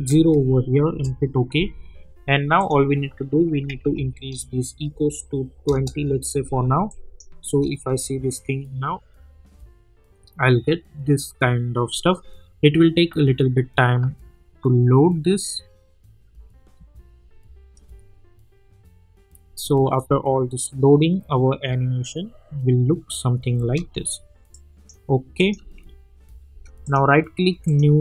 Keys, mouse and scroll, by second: 0.9 Return, 2.6 click, 5.6 Return, 6.9 click, 7.5 space, 23.6 space, 24.5-25.1 click, 25.6 space, 26.8 right click, 27.6-28.0 drag.